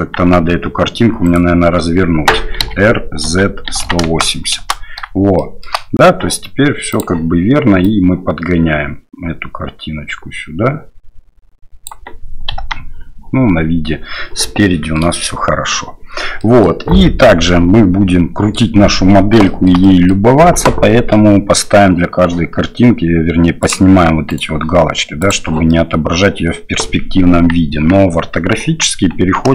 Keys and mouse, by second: 0.0 KP_1, 0.5 KP_3, 1.2 right click, 2.6 r, 5.4 shift+middle click, 6.9 click, 7.9-11.9 drag, 12.5 KP_1, 14.6-15.0 shift+middle drag, 16.4 middle drag, 17.4-18.5 middle drag, 19.4 shift+middle drag, 19.8 middle click, 23.6 click, 24.3 right click, 25.2 click, 25.7-26.8 middle drag, 27.7 KP_1, 28.1 KP_3, 28.6 KP_1.